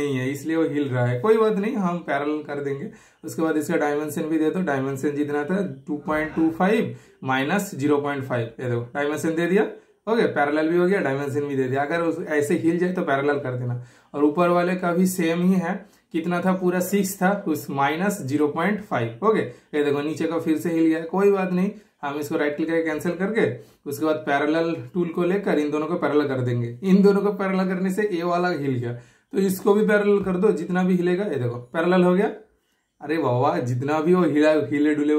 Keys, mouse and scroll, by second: 1.0 super+right click, 1.8 super+click, 12.3 super+click, 19.1 super+Return, 20.0 super+scroll down 1, 20.3 super+scroll up 1, 21.1 super+middle click, 21.9 super+right click, 22.8 super+click, 22.8 typing, 26.5-27.4 typing, 27.4 super+click, 28.6-30.8 super+middle drag, 30.8 super+click, 32.7 super+scroll up 1, 34.2 super+right click, 34.9-35.1 super+drag.